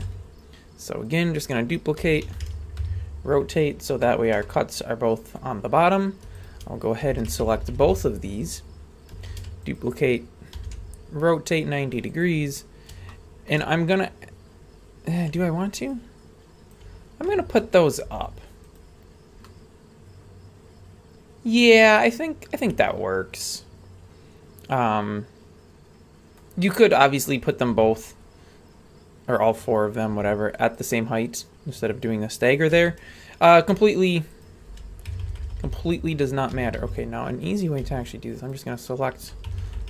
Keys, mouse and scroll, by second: 0.0 ctrl+click, 0.0 scroll up 2, 0.0 shift+d, 2.0 r, 3.6 scroll down 2, 4.0 shift+middle drag, 4.4-5.4 middle drag, 5.7-6.3 scroll up 1, 6.4 shift+right click, 7.2 ctrl+KP_Add, 7.3 ctrl+KP_Add, 7.4 ctrl+KP_Add, 7.6 ctrl+KP_Add, 7.7 ctrl+KP_Add, 7.9 ctrl+KP_Add, 9.4 shift+d, 10.6 r, 13.1 shift+middle click, 13.7 scroll up 2, 15.9 ctrl+click, 17.3 a, 17.6-18.0 middle drag, 18.1 z, 19.1-22.2 scroll down 2, 19.4-26.3 middle drag, 30.1 z, 32.8 shift+middle click, 34.3 right click, 35.1 ctrl+KP_Add, 35.2 ctrl+KP_Add, 35.4 ctrl+KP_Add, 35.5 ctrl+KP_Add, 35.7 ctrl+KP_Add, 36.5 a, 36.8 b, 37.8 b, 39.5 ctrl+KP_Add, 39.6 ctrl+KP_Add, 39.8 ctrl+KP_Add.